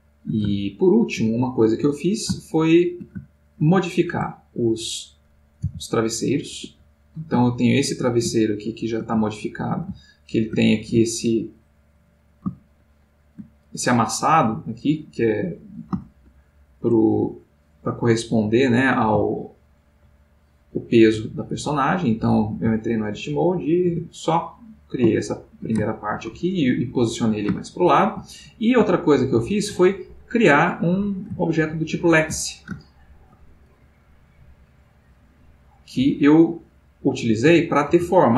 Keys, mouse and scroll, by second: 2.4-4.1 shift+middle drag, 4.1 Tab, 11.7-13.8 middle drag, 14.0 click, 25.1-30.8 shift+middle drag, 30.8 click.